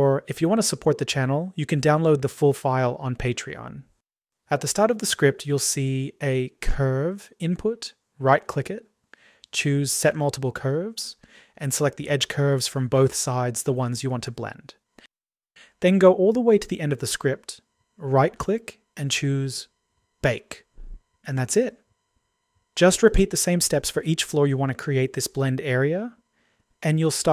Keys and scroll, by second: 22.2 Delete, 24.5 Delete.